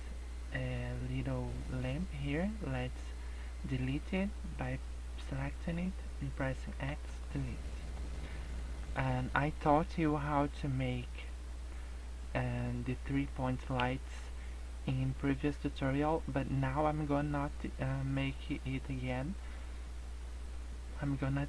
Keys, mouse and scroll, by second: 1.3 scroll up 2, 5.2 click, 6.6 x, 7.6 middle click, 8.3-9.6 scroll up 5.